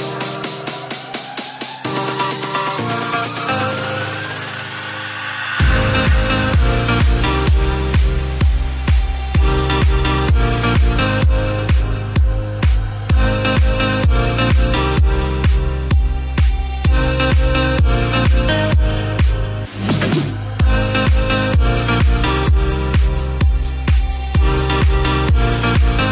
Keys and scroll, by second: 4.5 ctrl+z, 18.6 ctrl+z.